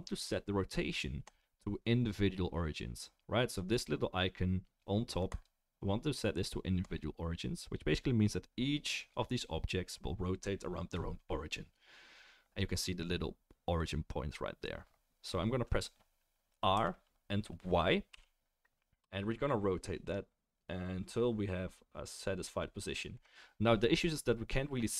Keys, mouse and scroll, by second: 1.2-3.6 middle drag, 3.6 right click, 5.3-24.9 middle drag, 16.8-24.9 drag, 16.8-24.9 right drag.